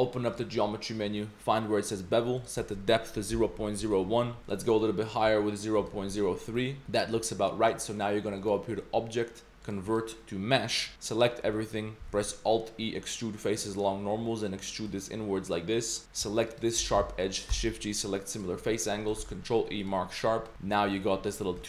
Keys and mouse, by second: 0.3 click, 2.4-3.8 drag, 4.4-6.4 drag, 6.5 middle click, 6.8 z, 8.6-10.8 drag, 10.9 Tab, 10.9 a, 11.2 click, 11.5 click, 12.1 alt+e, 16.0 2, 16.5 alt+click, 17.5 shift+g, 19.2 ctrl+e, 20.3 Tab, 20.9 click, 21.2 middle click, 21.6 shift+middle drag.